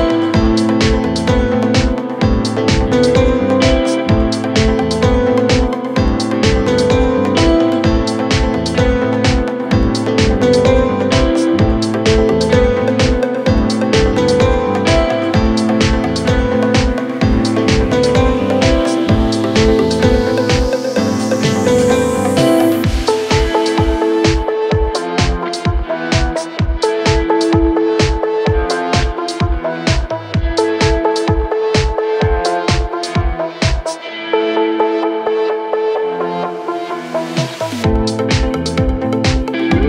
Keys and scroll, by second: 29.2 Delete.